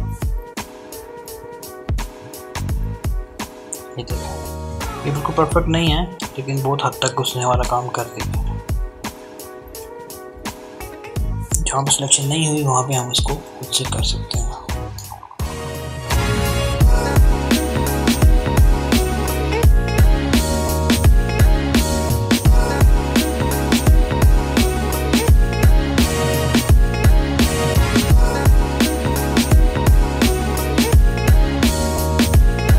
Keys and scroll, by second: 11.8-13.2 typing, 18.9 [, 23.5 [, 23.7 [.